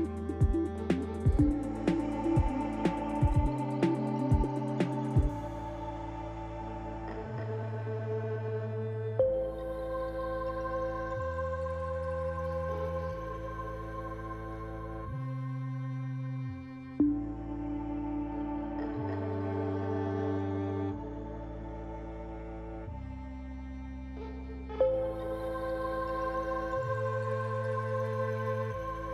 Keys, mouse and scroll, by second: 0.0 middle click, 1.4 Tab, 1.8 click, 2.3 Tab, 2.7 click, 3.1 Tab, 3.4 click, 4.8 click, 5.4 click, 5.9 Tab, 6.3 scroll down 1, 6.7 middle click, 8.0 shift+middle click, 9.1 scroll up 1, 10.3 ctrl+s, 11.2 click, 13.1 click, 14.3 click, 15.2 click, 15.4 click, 22.7 click.